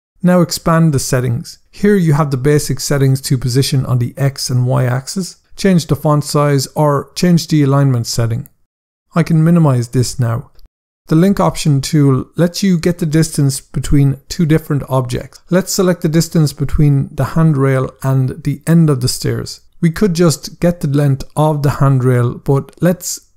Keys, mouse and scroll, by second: 0.9 click, 2.3 click, 9.6 click, 15.7 scroll up 1.